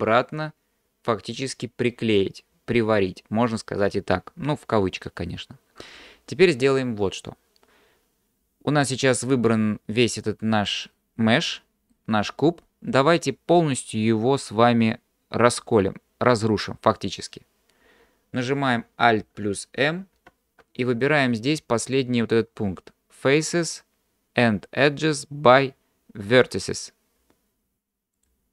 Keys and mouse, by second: 8.9 click, 11.0-12.0 middle drag, 20.2 alt+m.